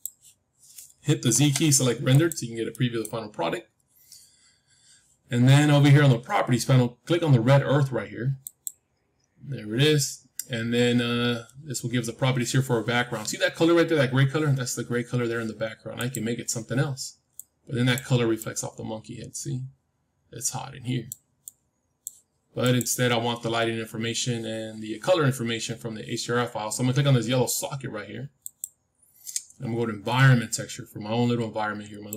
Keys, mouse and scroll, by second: 1.3 z, 2.7-5.0 middle drag, 5.0 scroll up 1, 5.2 middle click, 8.3-10.4 drag, 15.9-17.9 drag, 22.5-24.6 drag, 28.3-30.3 drag.